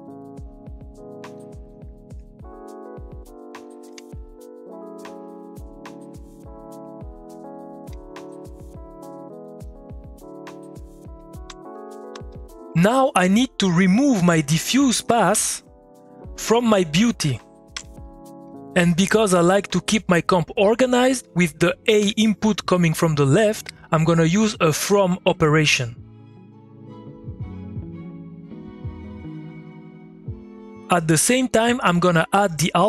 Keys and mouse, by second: 1.3 middle click, 1.7 click, 2.0 ctrl+click, 2.7 ctrl+click, 3.3 middle click, 3.6 click, 3.8 Tab, 4.2-6.7 drag, 7.0 ctrl+click, 8.0 middle click, 8.2 click, 8.7 middle click, 9.2 click, 9.4 click, 10.5 middle click, 11.0 click, 11.6-12.8 typing, 11.7 click, 14.2 click, 15.3 typing, 16.9 click, 17.7 3, 18.8 middle click, 20.1 click, 22.8 m, 23.2 click, 24.5-26.4 ctrl+drag, 26.4-32.1 drag.